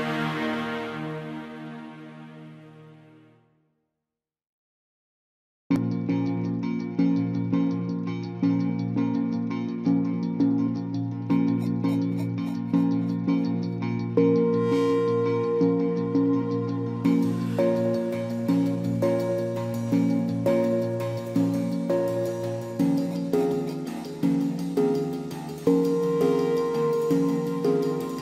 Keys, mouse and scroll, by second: 18.9 ctrl+d.